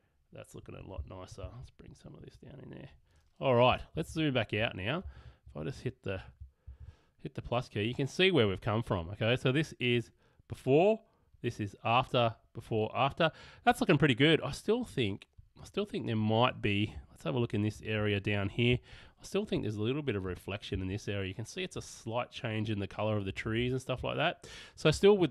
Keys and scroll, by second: 3.9 super+[, 5.2 super+-, 6.8 super+=, 17.2 super+=, 18.7 super+space, 20.7 space, 23.3 [, 24.9 alt+[.